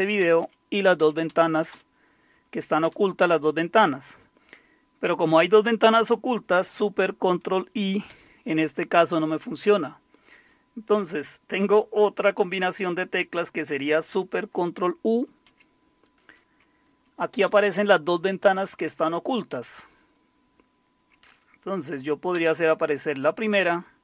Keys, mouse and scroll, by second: 0.2 Up, 1.0-3.3 typing, 8.1 ctrl+super+i, 15.5 ctrl+super+u, 17.0 Down, 17.5 Up, 22.3 Return.